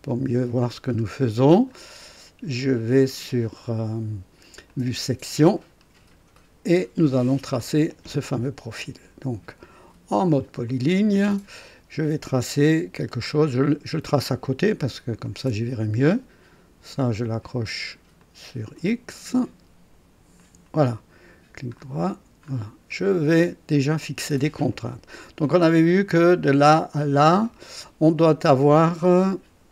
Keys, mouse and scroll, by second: 0.7 scroll up 1, 1.1 right click, 4.6 click, 5.7 scroll up 2, 6.3 right click, 7.1 scroll up 2, 7.5 right click, 10.6 click, 13.1 click, 15.2 click, 18.1 click, 20.3 click, 21.8 scroll up 1, 22.4 scroll up 1, 22.9 right click, 23.7 right click, 24.9 right click, 26.3 click, 27.3 click.